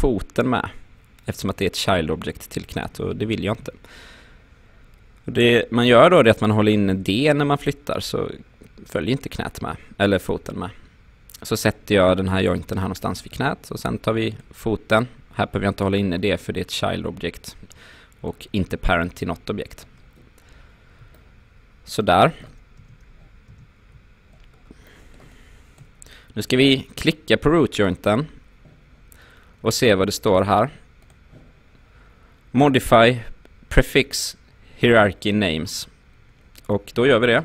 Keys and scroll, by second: 3.3 ctrl+z, 6.9 d, 22.8 space.